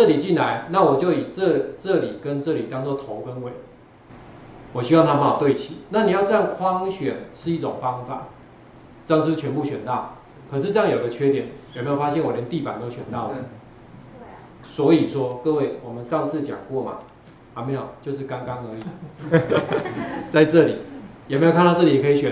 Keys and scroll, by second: 20.0 ctrl+4, 20.3 ctrl+4.